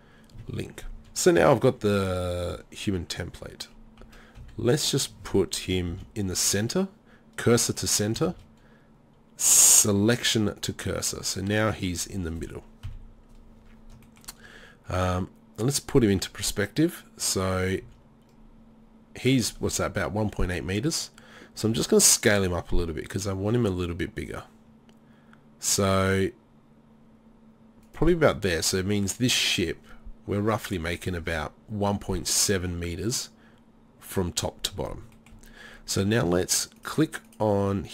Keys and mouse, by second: 4.0 KP_3, 4.4 KP_1, 5.9 shift+s, 8.3 shift+s, 12.9 KP_3, 15.1-16.2 middle drag, 17.8 z, 21.7 s, 28.0-33.3 drag, 35.7-36.8 drag, 36.8-37.9 right drag.